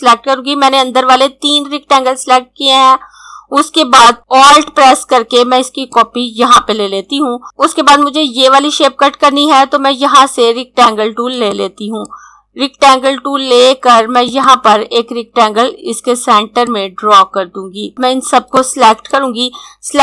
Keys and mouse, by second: 4.2 click, 11.4 click.